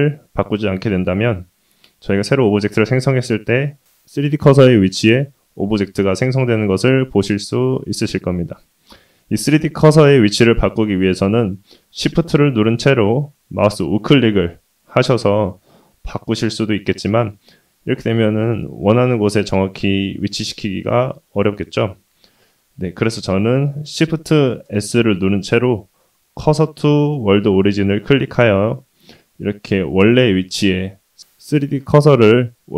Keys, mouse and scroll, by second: 1.2 shift+a, 3.0 middle click, 3.3 middle click, 3.8 middle click, 13.6 shift+right click, 14.5 shift+right click, 15.9 shift+right click, 17.1-18.4 middle drag, 20.8 middle click, 22.2 shift+middle click, 24.6 shift+s, 30.5 shift+middle click.